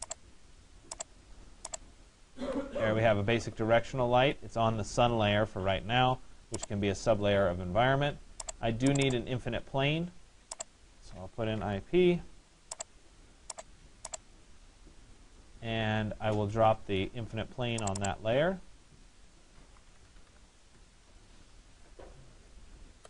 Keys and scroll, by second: 2.1 Delete, 20.2 Return.